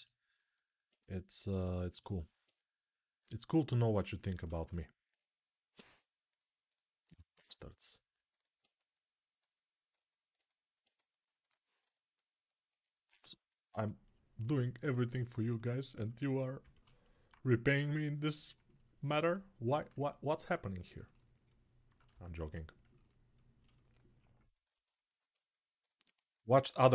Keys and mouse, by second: 12.4-20.6 right drag, 24.8-26.9 alt+shift+right drag.